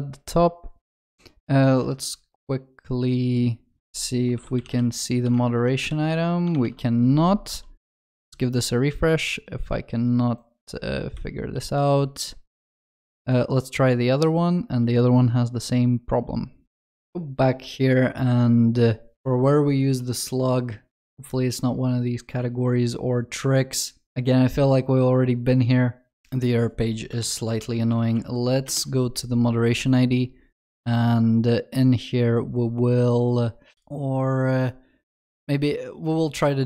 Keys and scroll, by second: 27.3 ctrl+shift+n.